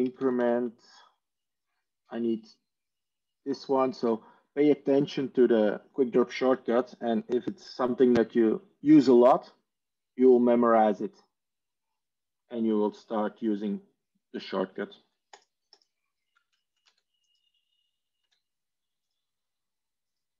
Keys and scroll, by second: 0.0-0.9 typing, 16.6 alt+F4.